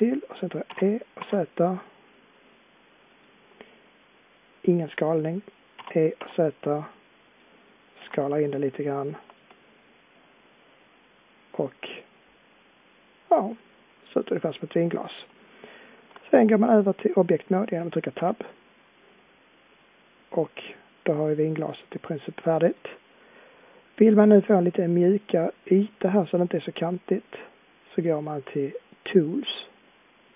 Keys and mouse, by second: 0.7 e, 5.8 e, 8.0 s, 10.2-11.5 middle drag, 12.8 middle click, 18.2 Tab.